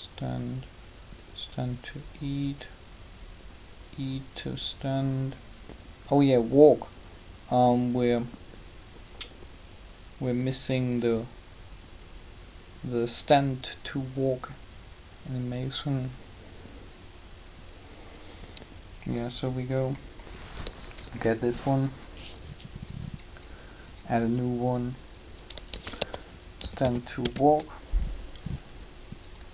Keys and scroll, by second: 20.8 3, 25.5-26.6 typing, 27.2 Return.